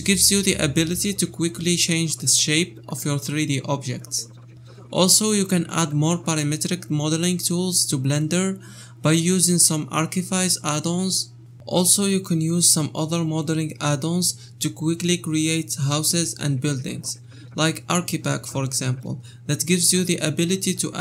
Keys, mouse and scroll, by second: 0.0 shift+r, 0.2 shift+middle click, 0.6 Left, 1.2 a, 1.4 scroll up 3, 1.6 shift+d, 2.5 shift+middle click, 2.7-3.1 scroll up 4, 3.1 g, 4.2 g, 4.7 scroll down 2, 4.9 shift+middle click, 5.3 click, 5.5 g, 6.3 scroll up 8, 6.5 shift+middle click, 7.1 scroll down 10, 7.3 shift+middle click, 7.8 click, 8.0 scroll up 3, 8.2 shift+middle click, 8.8-12.0 typing, 11.8 shift+middle click, 12.9 scroll down 3, 13.1-14.8 shift+middle drag, 14.8 scroll up 3, 15.0 shift+middle click, 16.5 scroll down 2, 16.7 a, 16.8-17.4 scroll up 1, 17.4 ctrl+j, 18.7 shift+middle click, 18.9 scroll up 4.